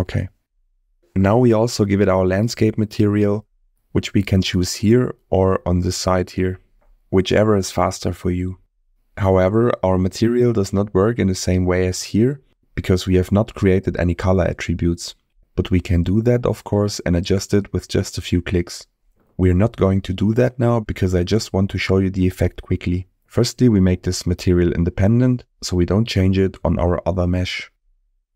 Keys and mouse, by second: 0.8 shift+middle click, 2.7-4.9 drag, 8.0 click, 10.2 middle click, 11.8 middle click, 16.0 middle click, 26.6 click, 27.7-28.3 drag.